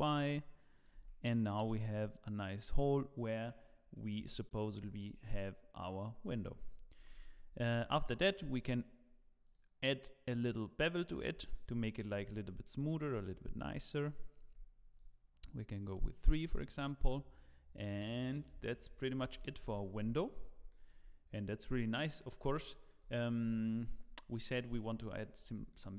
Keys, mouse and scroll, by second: 0.9 Tab, 1.5 scroll down 1, 3.9 scroll down 3, 4.7-5.1 scroll down 6, 5.3 middle click, 7.0 ctrl+s, 7.5 click, 8.0 shift+middle click, 8.5 click, 10.0 click, 10.8 middle click, 11.4 shift+middle click, 12.1-12.6 scroll up 9, 12.7 middle click, 13.2 shift+middle click, 13.9 click, 15.8 click, 16.2 click, 16.8 click, 16.8-17.4 scroll down 8, 17.4 middle click, 18.6 shift+middle click, 19.2 ctrl+s, 19.6 KP_0, 20.3 scroll down 2, 20.6 shift+middle click, 21.2-21.7 scroll up 2, 22.2 scroll up 2, 22.6 shift+middle click, 23.1 scroll up 5, 23.5 shift+middle click, 24.5 middle click, 24.9-25.3 scroll down 2, 25.3 scroll up 3, 25.7 shift+middle click.